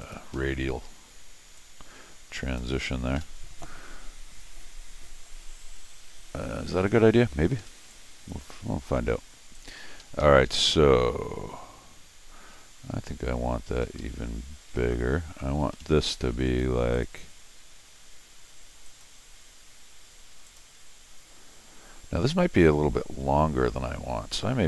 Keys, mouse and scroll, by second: 0.0 click, 0.3 Escape, 1.6-2.6 drag, 3.2 Escape, 7.6 Escape, 7.9 click, 9.5 click, 10.0 Escape, 10.2 Escape, 10.5 Escape, 13.8 Escape, 14.0 Escape, 15.7 Escape, 16.0 Escape, 16.5 d, 16.9 click, 18.8 click, 20.4 click.